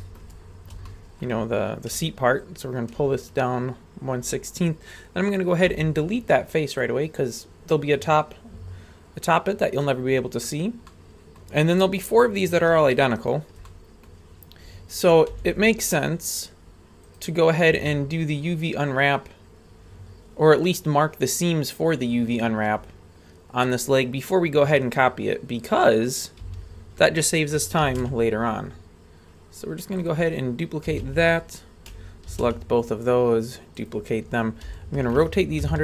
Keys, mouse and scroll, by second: 0.0 shift+middle click, 0.4 scroll up 2, 0.9 shift+middle click, 1.4 scroll up 1, 2.4 ctrl+click, 5.7 x, 9.3 click, 9.8-10.5 middle drag, 10.9-11.4 middle drag, 12.1 right click, 12.9 shift+right click, 13.7-14.1 middle drag, 14.2-14.6 scroll up 2, 14.9 shift+right click, 15.3 w, 17.7 a, 23.0-24.4 scroll down 1, 24.6-25.0 scroll down 1, 26.4 a, 27.9 shift+d, 30.4-30.9 scroll down 1, 30.9 a, 31.0 a, 32.3 shift+d, 34.6 r.